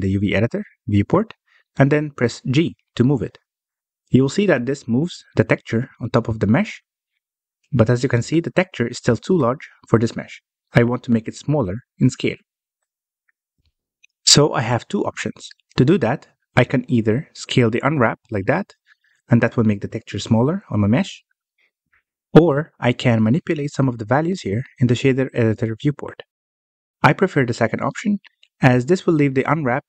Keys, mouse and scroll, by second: 3.0 g, 11.8-12.6 scroll up 2, 12.6-14.1 shift+middle drag, 14.1-16.0 scroll down 1, 16.0 scroll down 1, 16.3 middle click, 16.7-18.1 scroll up 1, 18.1 s, 25.7-26.0 scroll up 2.